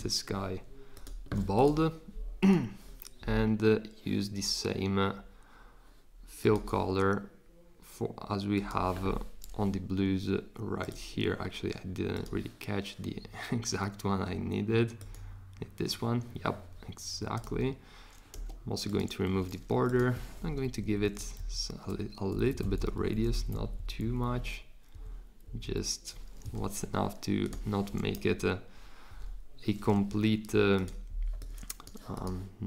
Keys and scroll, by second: 18.3 Escape, 18.3 \, 20.6 shift+Up, 20.8 shift+Up, 21.0 shift+Up, 21.3 shift+Down, 22.3 Down, 22.5 Down, 22.7 Down, 23.1 Down, 23.2 Down, 23.3 Down, 23.7 Down, 24.0 Down, 24.2 Down, 24.9 Up, 25.4 Down, 28.1 Up.